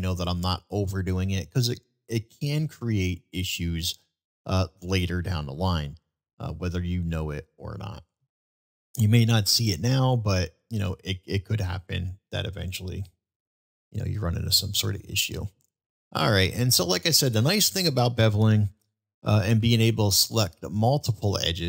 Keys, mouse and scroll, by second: 0.9-1.4 middle drag, 2.6-3.2 middle drag, 12.1-12.4 middle drag, 13.5 shift+middle drag, 14.4-15.0 shift+middle drag, 15.3 shift+middle drag, 15.9-16.3 shift+middle drag, 16.8-17.2 middle drag, 20.1 shift+click, 21.3-21.6 shift+middle drag.